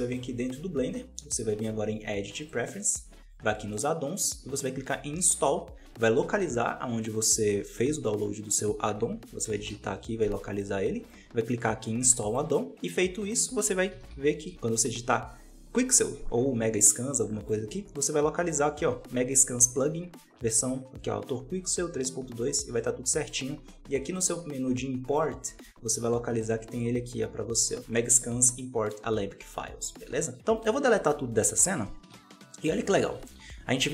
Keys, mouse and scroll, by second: 0.0-3.1 drag, 24.0-27.2 drag, 30.0 a, 30.2 x.